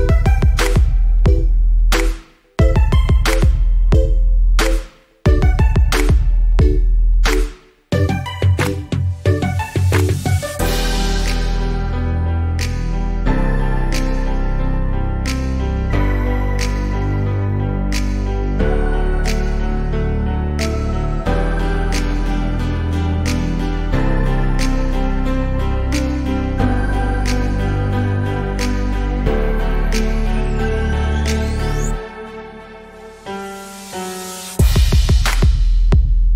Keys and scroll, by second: 6.3 ctrl+t.